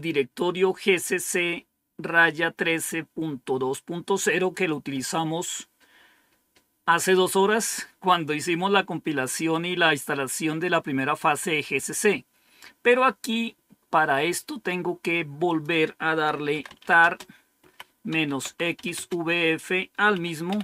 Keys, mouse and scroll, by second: 15.4 click, 16.6-20.6 typing.